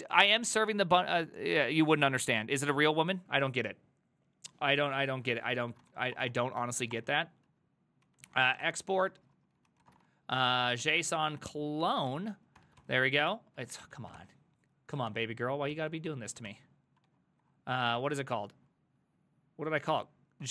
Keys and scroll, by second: 5.3 alt+{, 5.6-17.9 typing, 15.0 ctrl+x, 15.1 ctrl+f, 20.2-20.5 typing.